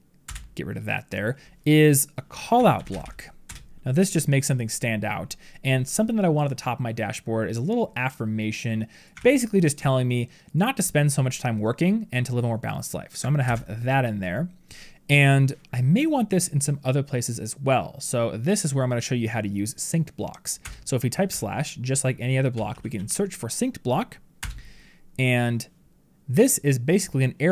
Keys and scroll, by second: 9.0 ctrl+c, 13.3 ctrl+v.